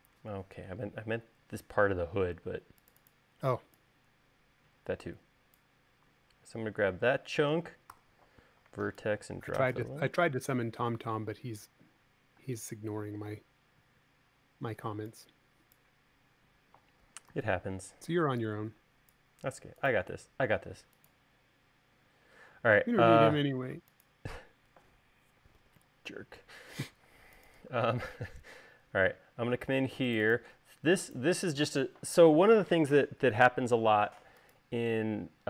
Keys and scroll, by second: 8.7 v, 13.1 space, 18.0 v, 27.9 space.